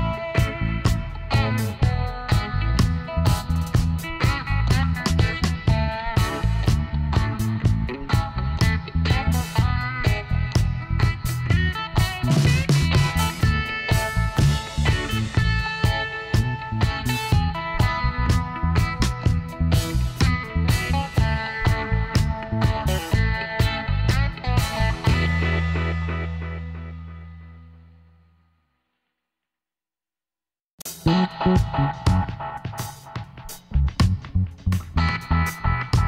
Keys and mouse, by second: 1.1 right click, 1.8 click, 2.2-3.5 middle drag, 2.9 i, 5.1 e, 7.3-8.9 middle drag, 9.7 alt+h, 12.8-15.6 drag, 15.6 ctrl+e, 19.5 Tab, 20.4 middle click, 21.5 Tab, 23.1 middle click, 24.4 ctrl+z, 24.8 ctrl+z, 26.0 click, 26.4-28.5 middle drag, 28.5 Tab, 29.1 middle click, 31.3 middle click, 34.0-35.1 middle drag, 35.1 KP_1.